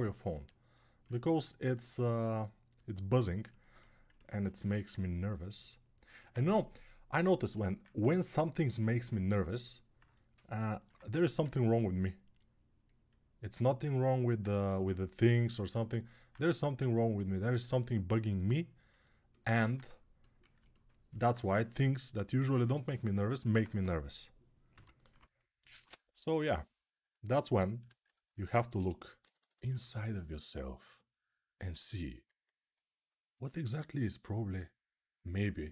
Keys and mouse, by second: 10.9 1, 16.0-23.0 alt+drag, 24.5-25.6 typing, 27.5-29.6 typing.